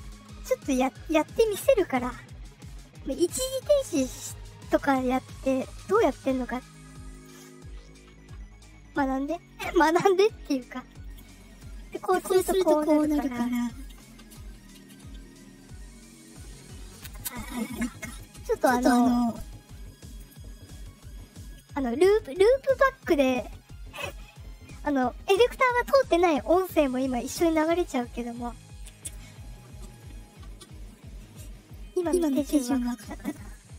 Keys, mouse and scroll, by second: 1.0 click, 7.0 click, 9.3 click, 10.8 click, 16.8 click, 19.9 click, 21.3 click, 27.8 click, 28.7 click, 32.0 click, 33.1 click.